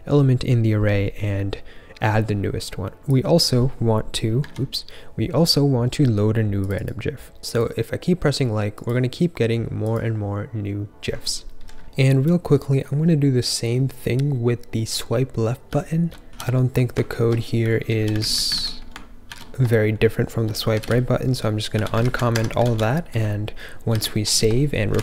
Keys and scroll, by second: 4.5 super+z, 15.8 typing, 16.2 ctrl+f, 17.5 k, 17.6 k, 17.7 k, 17.9 k, 18.1 super+/, 18.5 super+s, 19.2 ctrl+f, 19.7-21.7 typing, 22.0 super+/, 22.3 Escape, 22.6 super+s.